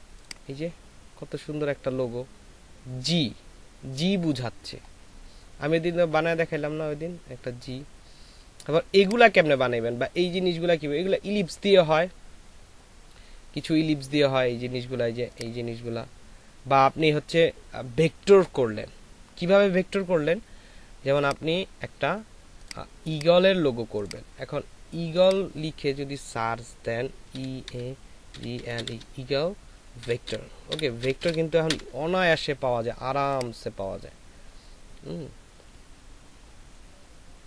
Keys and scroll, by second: 27.5-31.6 typing.